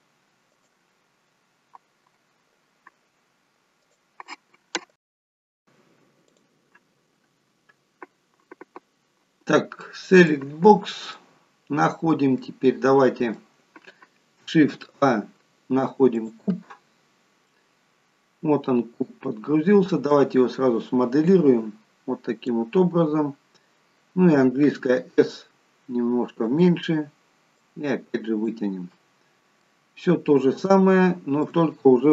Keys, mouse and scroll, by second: 0.5 right click, 9.9 click, 11.1 middle click, 12.3 middle click, 14.7 shift+a, 17.0-17.5 scroll down 3, 17.3 middle click, 21.2 click, 24.4 s, 27.5 click, 28.8 middle click, 30.6 shift+middle click.